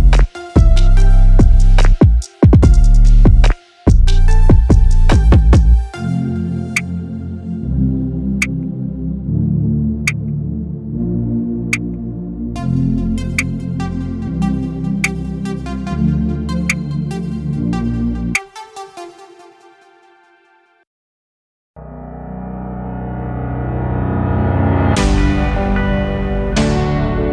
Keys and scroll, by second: 2.1 ctrl+0.